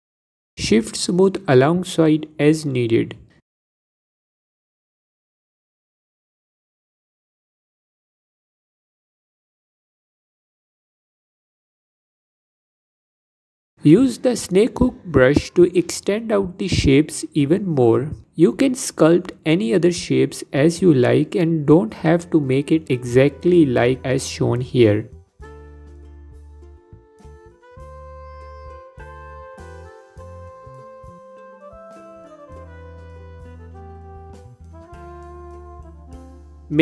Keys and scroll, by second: 9.2 f, 12.8 f, 15.4 f, 18.4 f, 19.3 f, 24.2 f, 27.1 f, 28.9 f, 31.4 f, 31.8 g, 33.9 alt+q, 34.2 f.